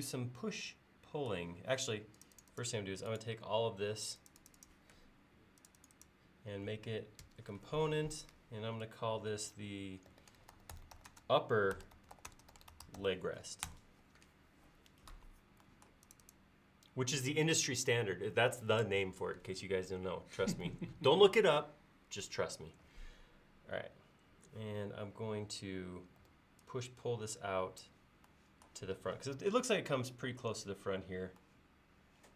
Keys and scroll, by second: 7.2 g, 9.9-13.5 typing, 13.7 Return, 26.2 p.